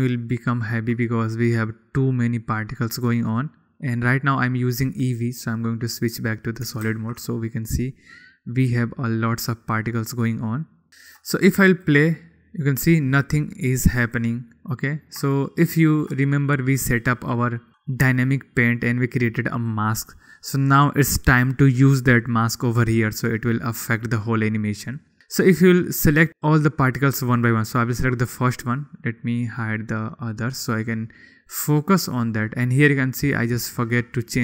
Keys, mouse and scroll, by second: 0.7-3.4 shift+middle drag, 6.7 click, 6.8 middle click, 8.0 ctrl+s, 8.3-9.8 middle drag, 9.8-11.1 drag, 11.1 shift+middle click, 11.3 shift+click, 11.6 shift+middle drag, 12.4 click, 14.7 click, 15.3-15.7 drag, 15.9-16.7 shift+middle drag, 17.4 shift+middle click, 18.9-19.4 middle drag, 30.0 middle click, 30.4 middle click, 31.1 middle click, 32.5-33.2 middle drag.